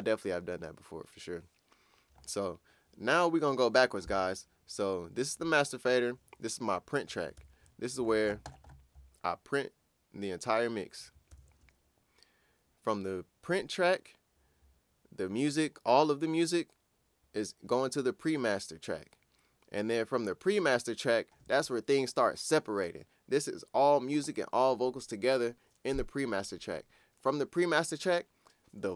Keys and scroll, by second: 7.4 super+`, 11.3 super+`.